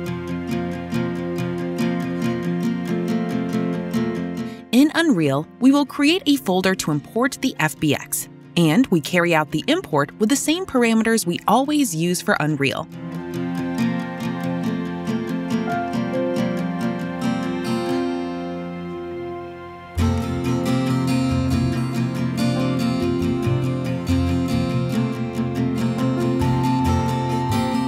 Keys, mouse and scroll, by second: 0.0-2.3 typing, 3.7 click, 4.6 right click, 6.5 click, 7.8-9.4 typing, 11.5 right click, 12.6 typing, 13.1 click, 13.7 click, 14.9 click, 25.1 click, 26.2 click.